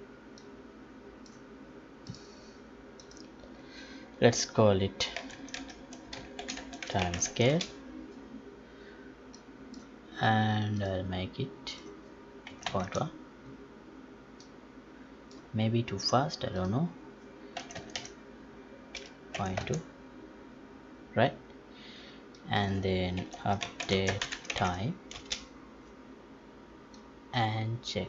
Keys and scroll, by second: 24.2 space.